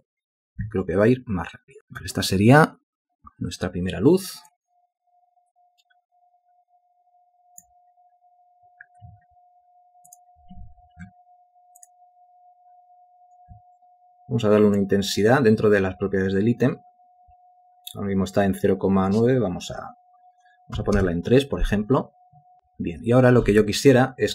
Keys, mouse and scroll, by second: 20.9 3, 21.1 Return.